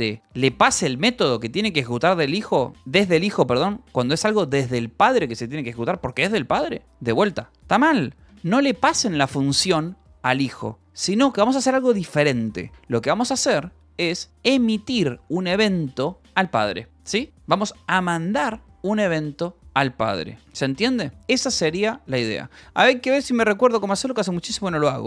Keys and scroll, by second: 0.2 Escape, 9.0 k, 9.5 a, 12.7 Escape, 13.7-15.0 typing, 16.2 h, 16.5 l, 19.5 k, 24.5 j.